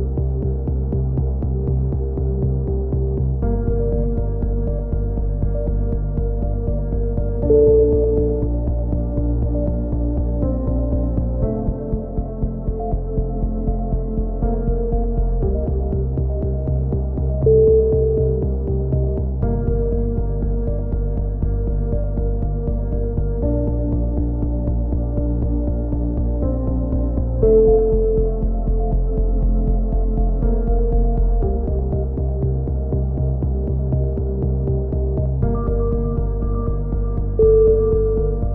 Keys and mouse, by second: 3.1 z, 3.8 click, 6.0 x, 6.7-8.1 drag, 7.5 KP_7, 8.1 z, 9.2-10.5 drag, 13.0 z, 13.1 click, 13.9 KP_3, 14.2-15.3 middle drag, 14.6 z, 15.3 ctrl+l, 16.0 shift+d, 16.6-18.5 drag, 20.6 z, 21.1 click, 21.9-23.3 middle drag, 23.3 KP_3, 23.7 middle click, 24.0 z, 24.3 click, 31.3-32.6 right drag, 32.6 middle click, 32.8 click.